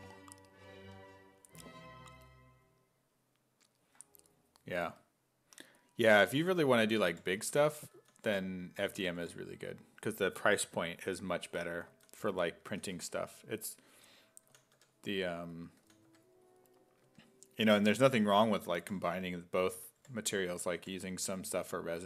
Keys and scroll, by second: 6.4-9.2 typing, 11.9 s, 12.7 s, 12.9 1, 14.5 s, 14.8 1, 15.8-21.3 typing.